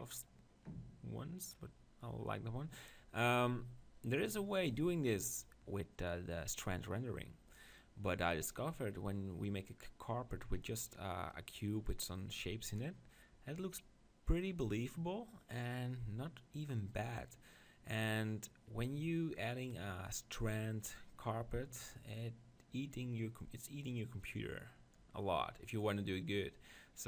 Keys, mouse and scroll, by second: 1.6-5.8 middle drag.